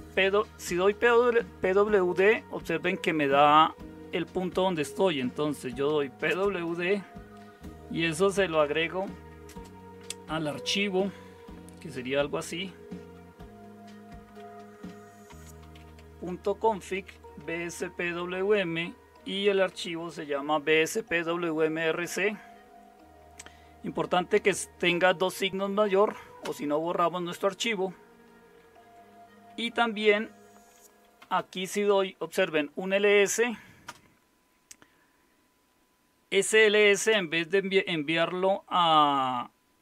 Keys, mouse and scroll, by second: 0.0-0.2 typing, 2.1 Return, 4.9-6.4 typing, 8.5-9.5 typing, 12.6 typing, 14.4-17.6 typing, 19.0-19.9 typing, 26.4 Return, 31.0-31.9 typing, 33.9 typing, 36.5-37.3 typing.